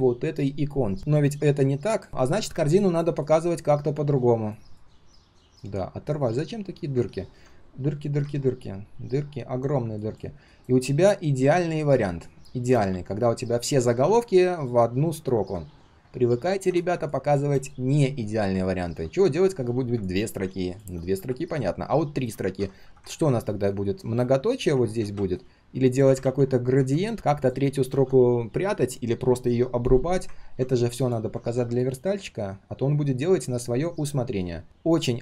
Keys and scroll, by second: 12.9 ctrl+z, 13.4 ctrl+z, 13.5 ctrl+z, 22.4 ctrl+z, 26.2 ctrl+d, 27.9 ctrl+z, 29.3 ctrl+z.